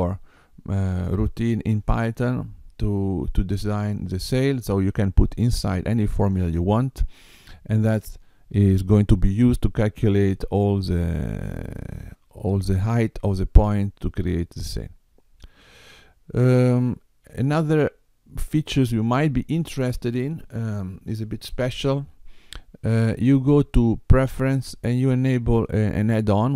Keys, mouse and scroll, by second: 15.6 click, 16.8 click, 22.9 click.